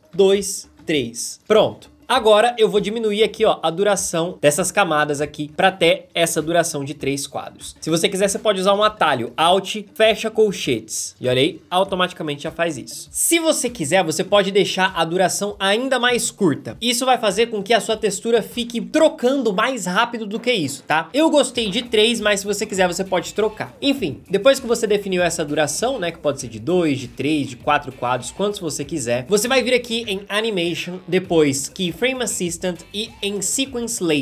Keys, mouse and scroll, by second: 0.1 ctrl+Right, 0.7 ctrl+Right, 7.8 ctrl+z, 10.6 alt+\.